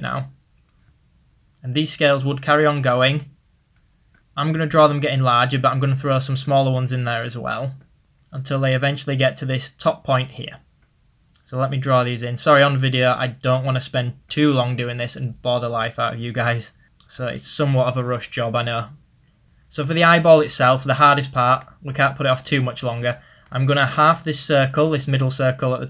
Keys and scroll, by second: 23.1 ctrl+z.